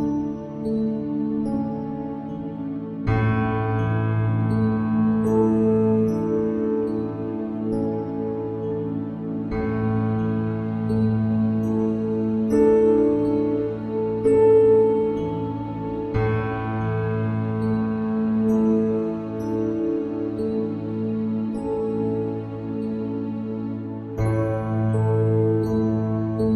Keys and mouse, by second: 4.2 click.